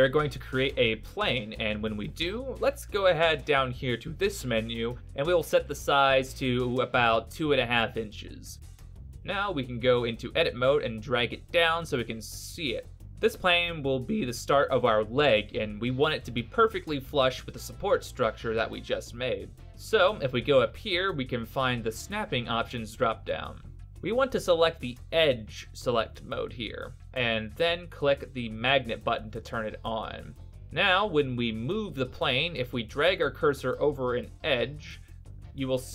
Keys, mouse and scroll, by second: 0.2 click, 6.6 middle click, 7.7-8.3 scroll up 4, 12.1 g, 22.8 click, 25.9 click, 27.9 g, 35.1 g.